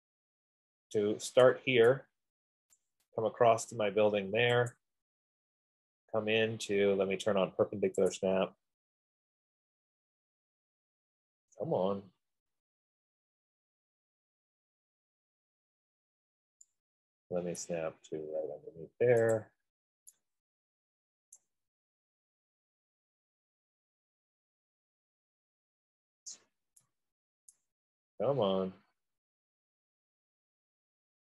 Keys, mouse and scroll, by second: 2.0 click, 3.1 right click, 5.1 click, 8.5 click, 11.7 middle click, 12.0 middle click, 12.2-12.6 scroll, 16.4-16.8 scroll, 18.1 right click, 19.6 click, 21.0 scroll, 21.6 right click, 21.9-23.4 scroll down 15, 24.0-24.7 scroll up 15, 25.2-25.8 scroll up 5, 26.0 scroll down 1, 26.1-26.9 scroll, 27.8 right click, 28.0-28.6 scroll, 28.6 scroll down 10, 29.8-30.2 scroll up 7, 30.4-31.2 scroll.